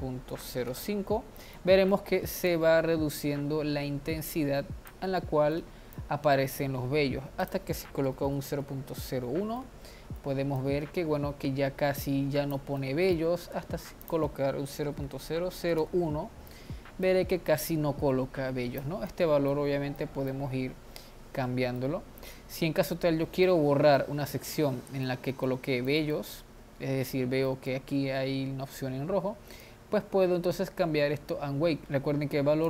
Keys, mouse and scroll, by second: 1.6 middle click, 2.6-5.3 drag, 5.3 middle click, 6.3-9.6 drag, 9.6-10.7 middle drag, 10.7-12.9 drag, 12.9-14.2 middle drag, 14.2-19.2 drag, 19.2-24.5 middle drag, 24.5-25.2 scroll up 3, 25.2-26.5 middle drag, 26.5-27.5 scroll down 1, 27.5 scroll down 1, 27.6-29.8 middle drag, 29.8-32.6 drag.